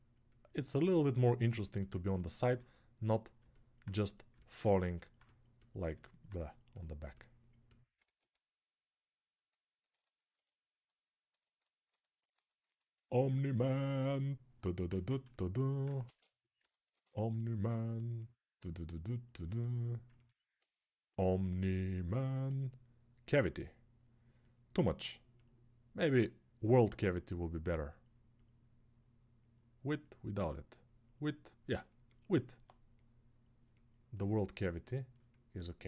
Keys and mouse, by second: 1.7-13.6 alt+drag, 15.8 ctrl+space.